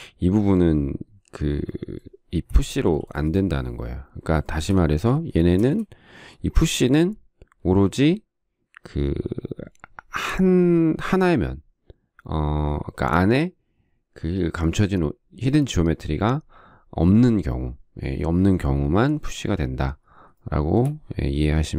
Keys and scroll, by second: 3.2 p, 5.9 space.